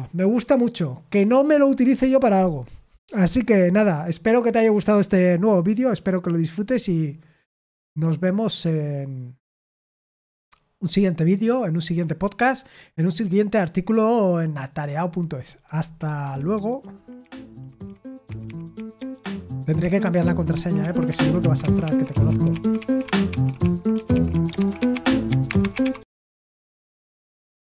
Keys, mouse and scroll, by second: 16.0 super+x.